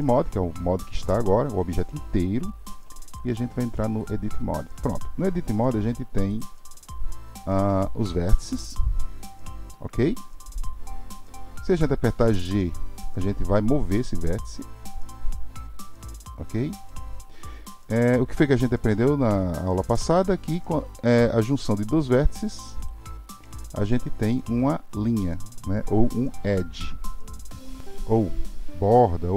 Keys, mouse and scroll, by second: 3.1-6.3 drag, 22.8-25.8 shift+drag.